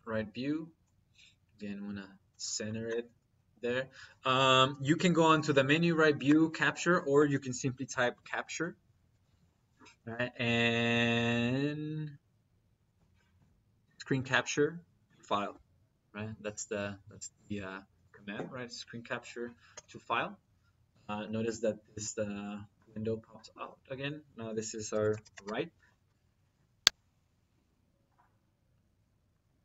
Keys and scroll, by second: 7.5-9.2 typing, 12.8 Down, 19.5 Return, 24.8-25.5 typing.